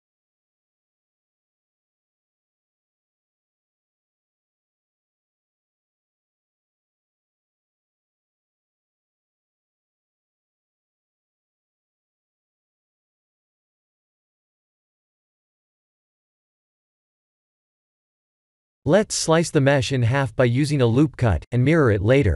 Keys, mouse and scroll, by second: 0.2-0.9 scroll up 6, 0.9 shift+middle click, 1.5-2.3 scroll up 4, 2.3 shift+middle click, 2.9-3.4 scroll up 3, 3.4 shift+middle click, 4.2 click, 4.9 shift+a, 8.2 r, 10.6 s, 13.1-14.5 scroll up 6, 14.5 s, 16.1 shift+middle click, 18.9 s, 21.1 Tab, 21.6 ctrl+r.